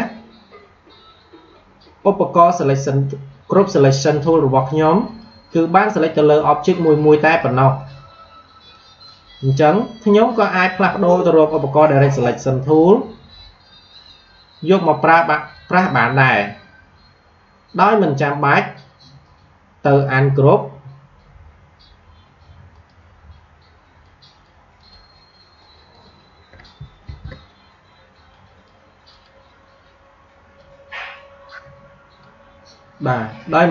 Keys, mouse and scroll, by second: 5.0 click, 12.8-18.8 drag, 22.6-27.0 drag, 27.0 ctrl+z, 28.2-33.7 drag.